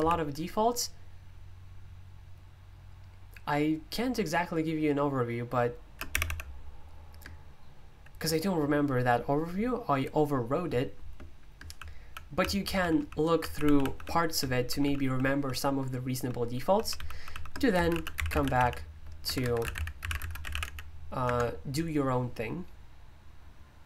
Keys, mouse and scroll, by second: 0.2-6.2 typing, 11.8-21.1 typing, 19.2 Escape, 19.4 Escape, 21.2 Return.